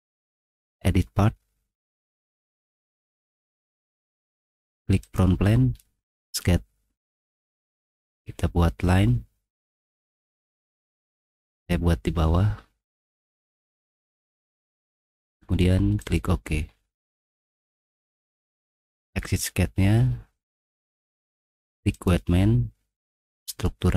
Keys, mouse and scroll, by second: 0.5 click, 2.4 click, 5.0 click, 6.2 click, 7.8 click, 11.5 click, 13.7 click, 13.8 click, 16.0 click, 16.6 middle click, 18.3 middle click, 19.2 click, 21.9 click, 23.5 click.